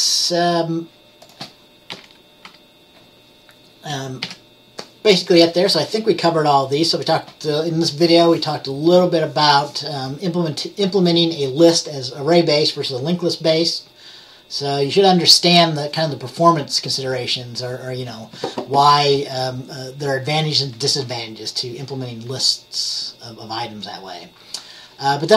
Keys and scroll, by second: 2.0 Page_Down, 2.6 Page_Up, 4.3 Page_Up.